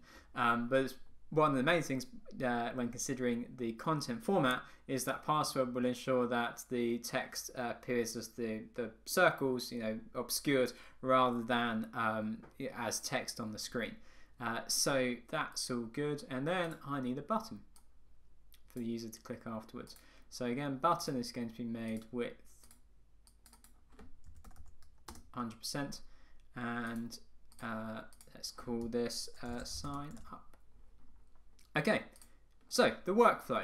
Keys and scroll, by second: 25.2 Return.